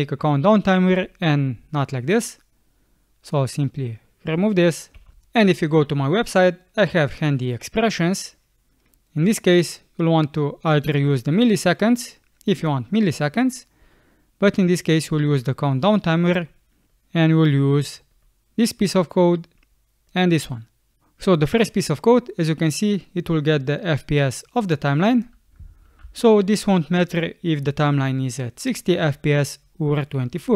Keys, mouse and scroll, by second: 5.0 BackSpace, 8.9 middle click, 9.2 click, 9.2 click, 9.3 click, 10.4 click, 10.5 click, 13.1 middle click, 25.8 ctrl+c.